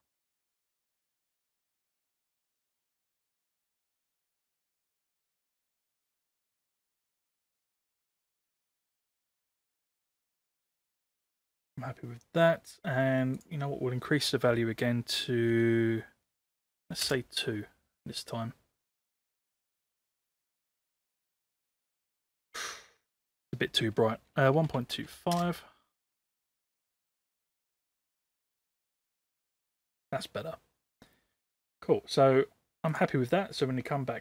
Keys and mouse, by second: 3.9 click, 13.3-18.9 drag, 23.0-28.1 drag, 32.9-33.4 drag.